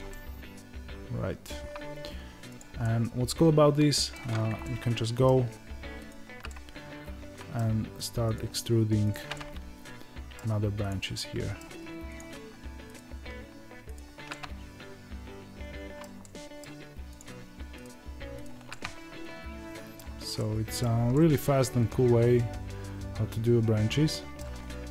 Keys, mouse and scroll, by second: 0.0-2.5 middle drag, 2.5 click, 2.7-6.0 middle drag, 6.0 ctrl+right click, 6.4-8.3 middle drag, 8.3 ctrl+right click, 9.3-10.8 middle drag, 10.8 click, 11.1 middle click, 12.1 click, 12.9 ctrl+right click, 14.2-17.1 middle drag, 17.1 click, 17.7 ctrl+right click, 18.6-24.9 middle drag.